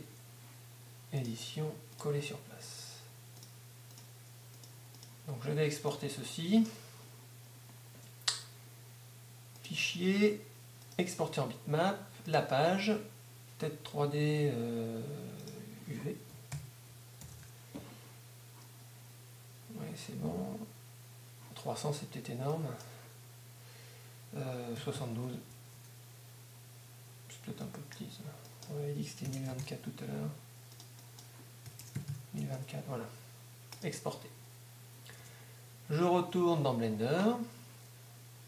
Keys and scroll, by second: 16.5 shift+-, 17.4 shift+v, 25.7 Tab, 30.6 typing, 32.4 Tab, 32.6 typing, 35.2 super+Tab.